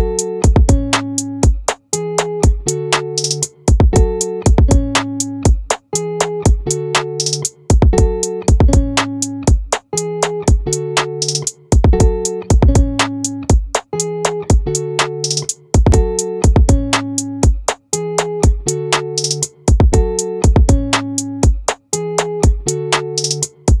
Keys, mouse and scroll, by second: 9.0-10.8 drag, 10.8-13.4 middle drag, 13.4-15.0 drag, 16.8-18.6 drag.